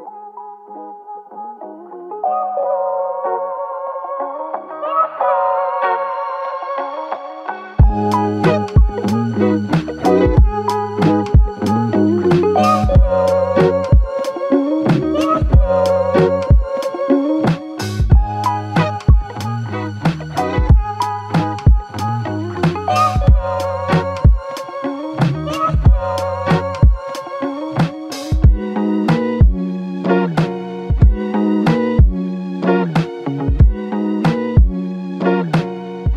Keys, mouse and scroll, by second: 9.1 ctrl+click, 12.7 ctrl+click, 13.3 ctrl+click, 15.9 ctrl+click.